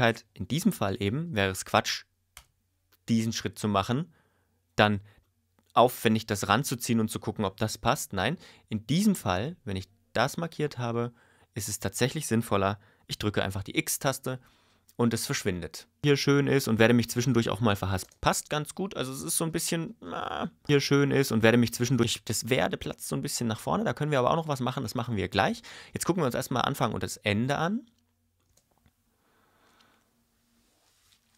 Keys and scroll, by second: 2.3 BackSpace, 4.8 ⟲, 16.0 space, 18.0 space, 20.6 space, 22.0 space, 28.4 space.